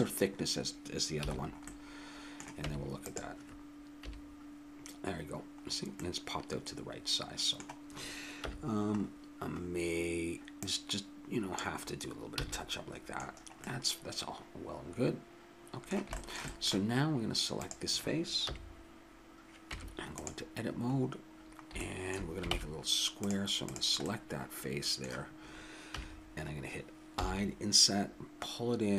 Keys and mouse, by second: 1.2 a, 2.6 Tab, 4.0 KP_3, 5.7 middle click, 6.4-7.9 middle drag, 8.4 KP_1, 10.6-12.4 drag, 12.4 a, 12.6-14.1 middle drag, 16.2-17.2 middle drag, 17.6-19.3 drag, 18.4 KP_3, 19.7 Tab, 22.5 ctrl+Tab, 23.6 click, 25.9 KP_3, 27.1 i.